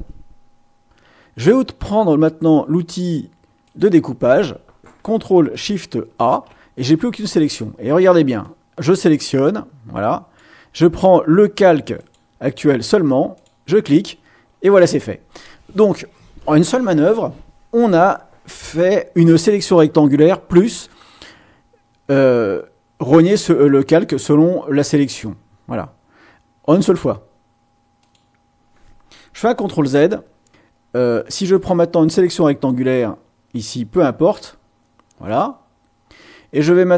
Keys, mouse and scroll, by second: 3.6 click, 6.2 ctrl+shift+a, 8.4-10.5 drag, 12.0 click, 13.3 click, 24.7 click, 28.0 click, 29.8 ctrl+z, 31.5 click, 32.6-34.5 drag, 35.3 click.